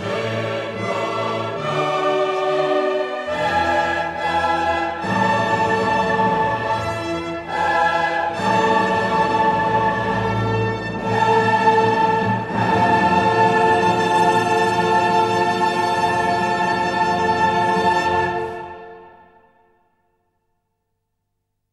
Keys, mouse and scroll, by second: 7.7 click, 13.9 click, 20.0-21.7 drag.